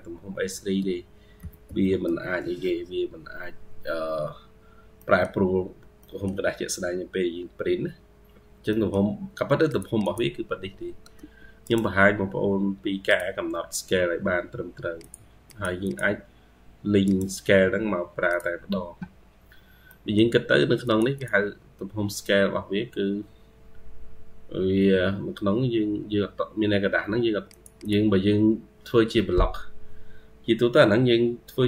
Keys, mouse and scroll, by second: 0.6 Tab, 0.9-2.4 typing, 3.6 scroll down 1, 3.9-4.8 scroll up 5, 5.5-5.8 scroll up 2, 8.1 scroll up 1, 8.3 scroll down 1, 9.9 double click, 11.0 Escape, 11.5 right click, 15.3 double click, 15.7 double click, 16.9 right click, 19.7 middle click, 20.4 Escape, 21.0 double click, 25.5-26.4 scroll down 2, 27.0 Escape, 27.7 double click.